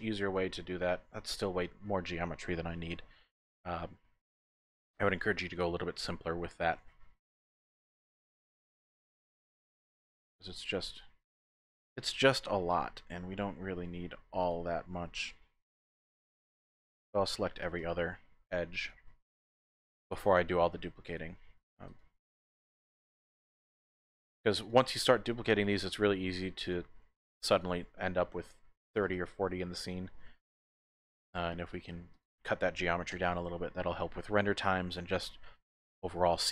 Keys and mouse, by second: 0.3 Tab, 9.2 typing, 9.5 click, 11.7-15.0 typing, 12.7 alt+shift+click, 14.4 alt+click, 15.2 alt+shift+click, 17.0 alt+shift+click, 17.8 alt+shift+click, 18.7 alt+shift+click, 20.2 alt+shift+click, 21.2 alt+shift+click, 21.9 alt+shift+click, 22.9 alt+shift+click, 23.8 alt+shift+click, 25.7 alt+shift+click, 26.6 alt+shift+click, 29.0 alt+shift+click, 29.1 typing, 29.8 alt+shift+click, 32.1 alt+shift+click, 33.1 x.